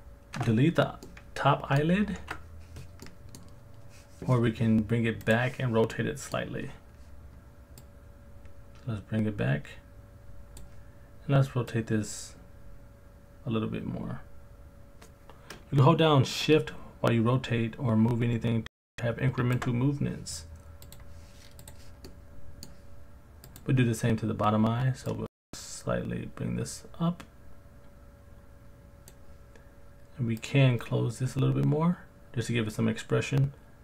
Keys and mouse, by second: 0.4 Delete, 1.1-1.8 middle drag, 2.2 ctrl+z, 3.0-3.4 middle drag, 5.3 click, 5.9-6.4 middle drag, 7.9 click, 8.3 click, 11.7 click, 12.0 click, 22.1-22.6 middle drag, 25.1 click, 25.6-28.5 drag, 30.4 click, 30.6 click.